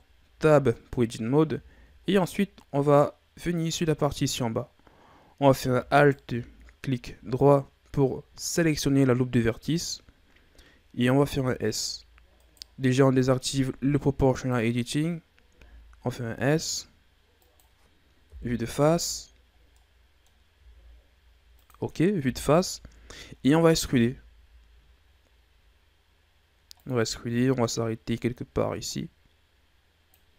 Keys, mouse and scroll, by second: 1.0 scroll down 2, 1.7-2.0 shift+scroll up 2, 2.0-3.1 middle drag, 3.1-5.9 scroll up 4, 5.9 alt+right click, 11.1 s, 14.3 click, 15.4 s, 18.2 KP_1, 19.7 middle click, 20.4 s, 22.2 KP_1, 23.2-23.7 scroll down 2, 23.7 e, 27.0-27.7 scroll down 4, 27.7-28.8 scroll up 1, 28.8-30.3 drag.